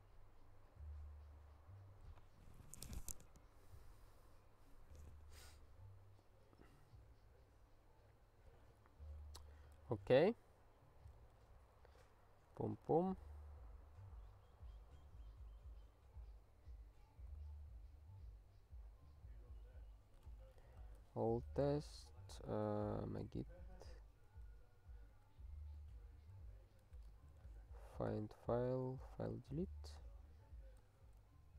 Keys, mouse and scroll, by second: 9.3 ctrl+j, 11.4 super+f, 12.6 click, 12.8 Tab, 17.3 super+b, 21.7 alt+x, 29.3 Return.